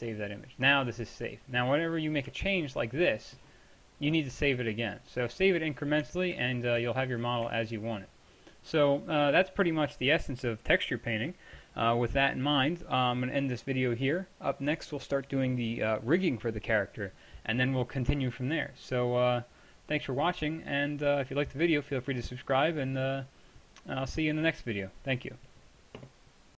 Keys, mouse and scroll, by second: 1.4 click, 1.9-2.4 middle drag, 2.4-4.5 drag, 6.4 ctrl+z, 6.8 ctrl+z.